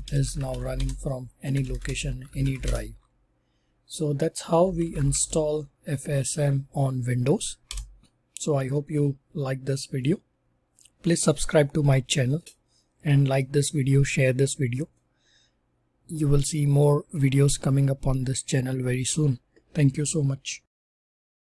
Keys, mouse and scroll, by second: 0.0-5.6 typing, 7.6 Return.